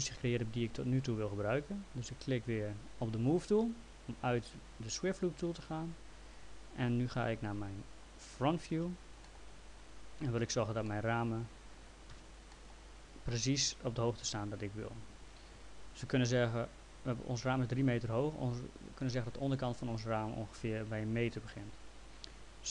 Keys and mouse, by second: 3.6 click, 8.7 f, 9.2 middle click, 10.9 alt+middle click, 12.1 f, 12.5 middle click.